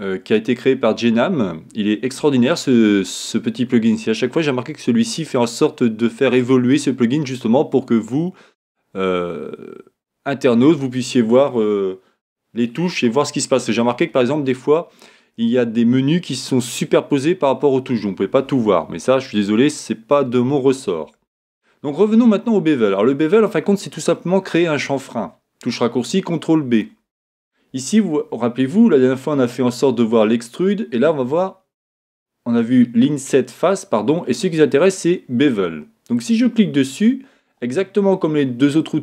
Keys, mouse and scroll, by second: 0.0-4.0 middle drag, 24.9-36.1 middle drag, 36.1 click.